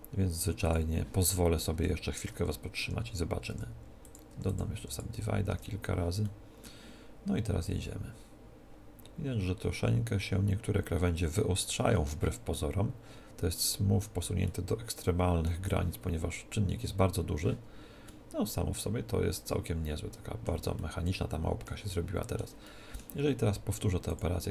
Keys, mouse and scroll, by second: 2.8 Tab, 3.5 w, 4.3 w, 4.8 w, 5.6 Tab, 6.3-7.7 middle drag, 7.7 click, 11.6-14.3 middle drag, 14.5-16.5 middle drag, 18.1-19.9 middle drag, 20.8-24.5 middle drag, 24.1-24.5 drag.